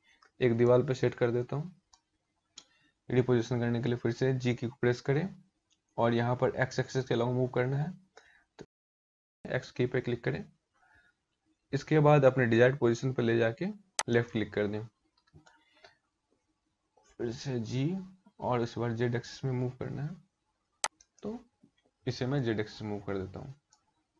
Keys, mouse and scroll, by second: 0.1 middle click, 3.0 g, 16.6 g, 21.9 middle click, 23.5-24.1 scroll down 2.